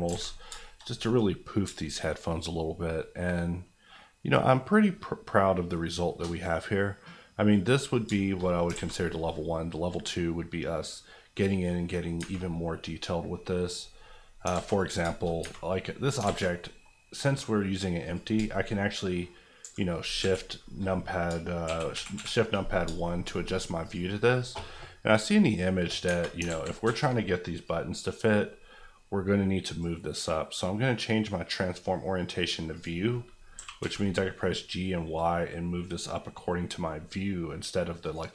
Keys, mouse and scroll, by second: 0.0 alt+middle click, 0.1 alt+a, 0.3-0.6 scroll down 2, 0.6 shift+middle click, 1.6 shift+middle click, 2.1-8.0 middle drag, 8.0 shift+middle click, 8.4 middle click, 8.5 scroll up 2, 8.7 alt+a, 8.8 alt+middle click, 9.1 middle click, 11.4 click, 11.8 middle click, 12.2 Tab, 12.3 scroll up 1, 12.8 middle click, 13.9-14.5 scroll down 2, 14.5 alt+z, 15.1 shift+middle click, 15.4 Tab, 15.8 middle click, 16.1 scroll down 1, 16.2 alt+z, 16.5 middle click, 16.9 scroll down 1, 18.0 click, 18.3 shift+click, 22.9-23.3 shift+scroll up 2, 23.8 click, 26.0 Tab, 26.4 alt+z, 27.1 a, 27.6 click, 33.6 g, 33.8 y, 38.0 click.